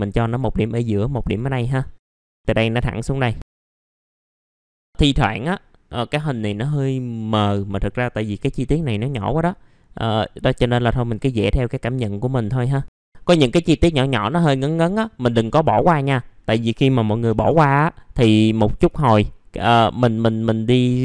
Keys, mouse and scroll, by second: 0.2 click, 1.6 scroll down 1, 1.8 middle click, 3.4-4.0 scroll up 2, 3.6 click, 4.1 click, 4.7 middle click, 4.7-5.2 scroll down 1, 8.5-9.3 scroll up 1, 13.0 click, 13.2 scroll down 1, 14.8 middle click, 15.3-15.8 scroll up 1, 16.5 middle click, 17.3 BackSpace, 18.8 click.